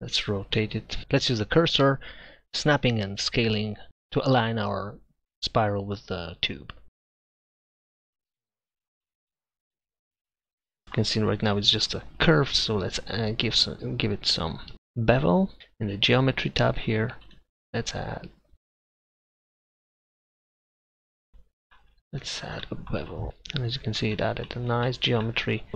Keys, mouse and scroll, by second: 1.0 s, 1.6 s, 2.6-5.6 typing, 4.4 right drag, 4.6 Tab, 5.3 Tab, 5.4-5.9 right drag, 6.2 Tab, 6.7 s, 6.8 click, 7.0 s, 7.0 a, 7.9 s, 8.7 Tab, 9.2 z, 10.0 click, 15.6-19.5 drag, 19.5 ctrl+a, 21.4-21.7 middle drag.